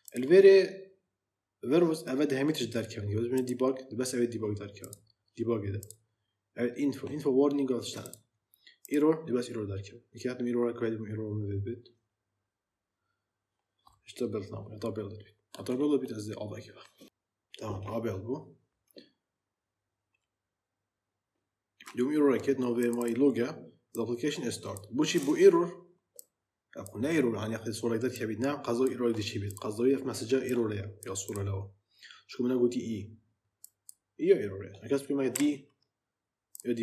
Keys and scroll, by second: 35.2 d.